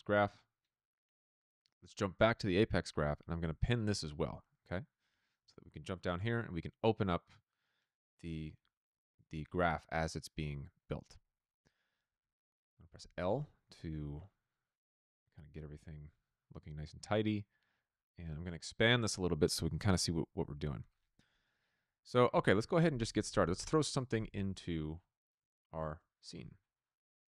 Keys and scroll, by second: 0.0-0.5 typing, 2.1 r, 5.3 r, 6.1 Return, 12.9 l, 22.8 Tab, 22.9-24.1 typing, 25.4-26.4 typing.